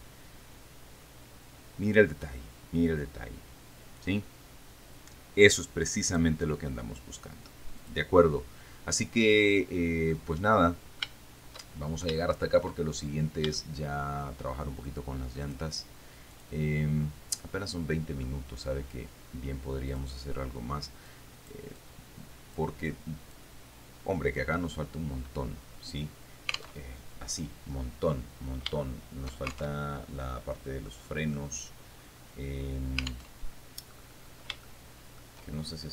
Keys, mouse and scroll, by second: 6.3 click, 8.1 click, 9.4-10.2 scroll down 1, 10.4-11.4 middle drag, 12.0-12.4 shift+scroll down 1, 12.4 shift+middle click, 13.0-13.8 shift+scroll up 1, 13.8 shift+scroll down 1, 14.0 shift+click, 15.7 click, 16.6 click, 17.6-18.7 middle drag, 18.7-19.8 scroll up 1, 20.2 click, 21.3 click, 22.0-23.0 drag, 23.1 click, 27.0 alt+Tab, 29.0 shift+middle click, 30.0 alt+shift+Tab, 31.2 middle click, 33.5 alt+Tab, 34.2-34.9 scroll up 1, 34.9 shift+middle click.